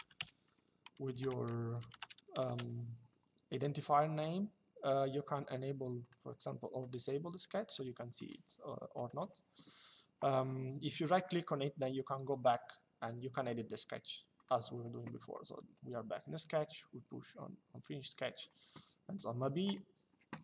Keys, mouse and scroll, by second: 2.2 KP_Enter, 5.0 click, 10.7 right click, 14.1 click.